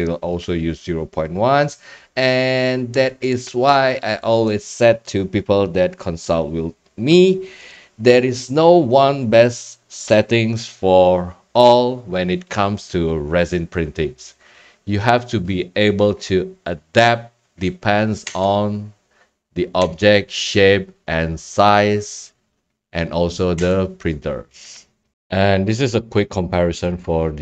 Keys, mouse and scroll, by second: 7.7 click, 18.2 Tab, 19.8 Tab, 23.6 Tab, 25.1 click, 27.0 click.